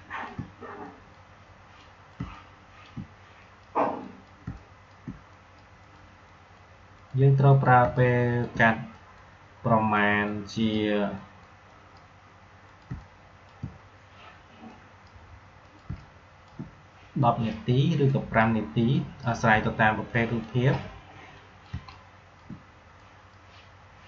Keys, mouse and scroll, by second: 0.0 space, 0.7 click, 0.8 click, 2.1 space, 2.3 click, 2.5 space, 3.3 click, 4.4 space, 4.6 click, 4.8 space, 5.3 click, 6.9 click, 7.7 space, 7.9 click, 8.2 space, 8.9 click, 12.8 space, 12.9 click, 13.3 space, 14.6 click, 15.8 space, 15.9 click, 16.3 space, 17.1 click, 21.7 space, 21.8 click, 22.2 space, 22.9 click.